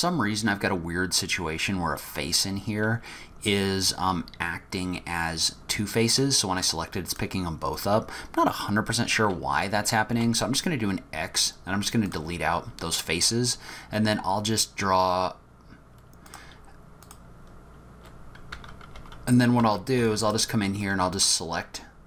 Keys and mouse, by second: 6.1 click, 6.6 click, 7.1 click, 10.1 x, 16.3 click, 18.5 1, 19.0 2, 19.6 3, 20.0 2, 20.2 click.